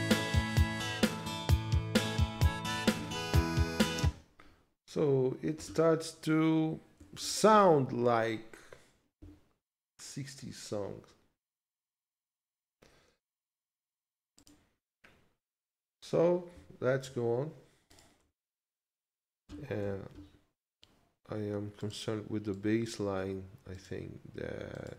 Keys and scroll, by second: 2.9 ctrl+Left, 4.0 space, 7.2 ctrl+s, 19.8 ctrl+s.